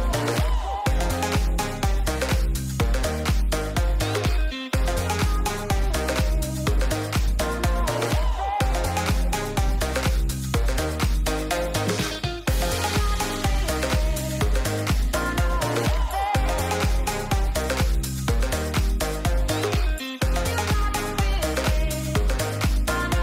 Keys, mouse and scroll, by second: 2.1 Tab, 2.9 middle click, 4.0 shift+middle click, 5.7 click, 6.1 click, 6.4 click, 7.0 click, 7.4 Tab, 8.4 click, 9.0 middle click, 11.1 l, 11.4 l, 12.2 click, 16.0 click, 16.7 shift+middle click, 17.5 click, 17.7 click, 17.8 click, 19.1 Tab, 21.5 middle click, 21.8 click.